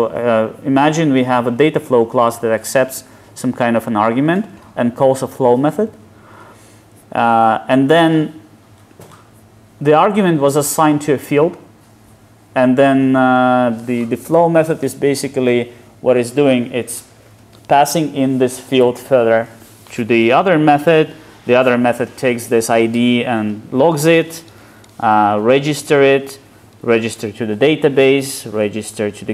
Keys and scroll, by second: 6.5 super+b, 20.9 super+b, 28.2 alt+super+[.